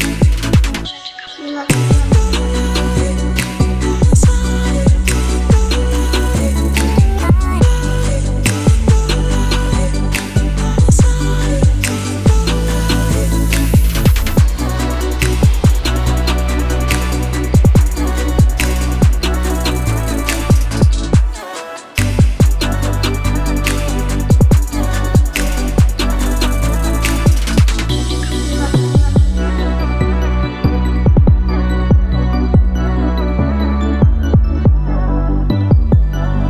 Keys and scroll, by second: 9.4 super+c, 11.1 super+v, 12.9 super+v, 29.3-32.4 typing.